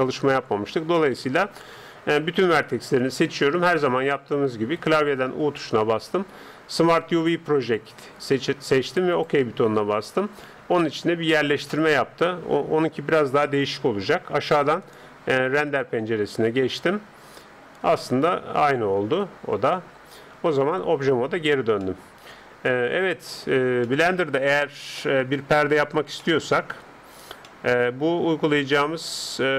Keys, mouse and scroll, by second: 1.8 a, 5.3 u, 10.8 scroll up 1, 11.0-14.8 middle drag, 14.8-16.7 drag, 18.0-19.8 middle drag, 20.8 Tab, 21.8-29.4 middle drag.